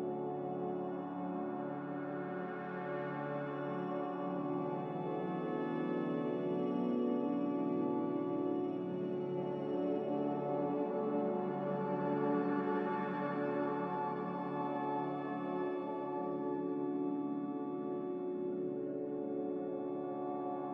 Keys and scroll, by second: 4.6 r, 9.4 shift+Escape, 9.8 a, 13.5 ctrl+v.